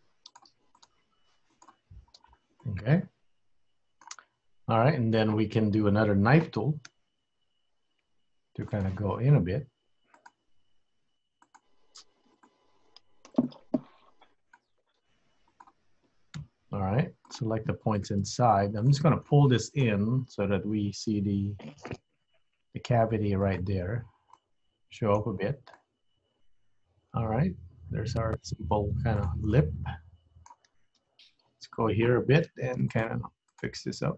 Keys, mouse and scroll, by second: 0.8 click, 1.0 g, 2.2 scroll up 1, 2.4-2.7 scroll down 4, 2.7 middle click, 4.4 scroll up 2, 6.9 k, 17.4 click, 18.0 shift+click, 18.8 click, 19.4 middle click, 20.4 KP_3, 22.4 g, 24.0-24.4 scroll up 2, 24.4 middle click, 25.8 middle click, 29.2 click, 29.6 middle click, 31.1 KP_3, 32.5 g, 33.6 click, 34.0 g.